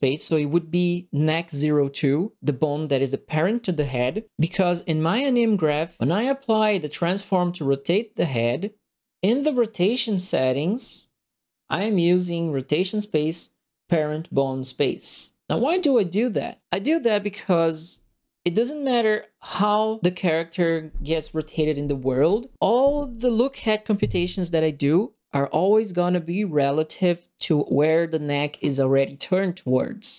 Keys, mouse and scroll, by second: 5.9 middle click, 6.4 right click, 8.1 click.